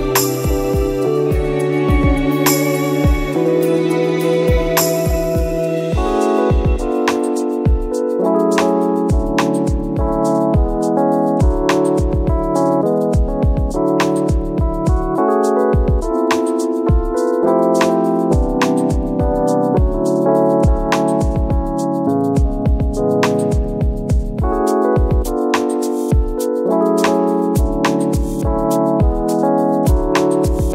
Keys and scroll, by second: 0.9 space, 4.4 ctrl+d, 5.4 ctrl+d, 5.5 ctrl+-, 7.7 ctrl+d, 9.0 ctrl+d, 10.0 ctrl+d, 10.9 space, 11.8 ctrl+d, 12.7 ctrl+d, 14.9 ctrl+z, 16.4 ctrl+-, 18.0 ctrl+d.